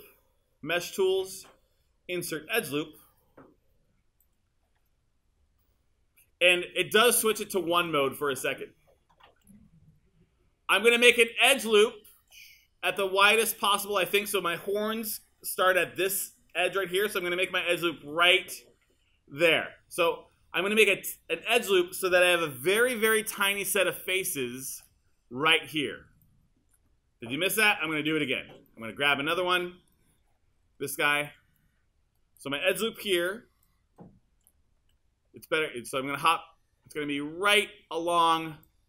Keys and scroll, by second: 7.0 1, 33.1 1, 35.5 1, 36.0 3, 37.1 1.